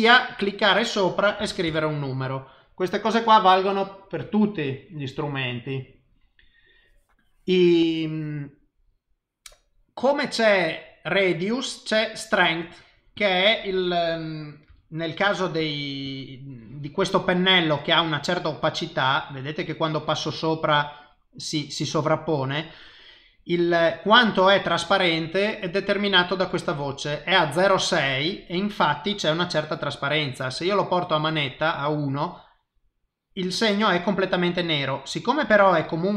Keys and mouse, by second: 0.3 click, 12.7 click, 13.2 click, 14.7 f, 15.6 click, 16.0 click, 16.6 click, 17.8 click, 18.2 click, 18.6 click, 19.1 click, 19.8 click, 20.3 click, 20.7 click, 28.5 click, 30.5 click, 33.1 click, 33.5 click, 34.8 click.